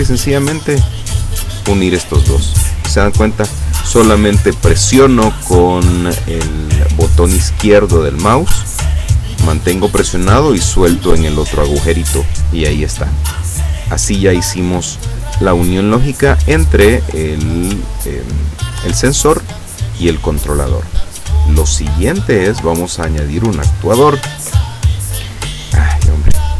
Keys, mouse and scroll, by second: 14.1-15.2 drag, 24.3 click.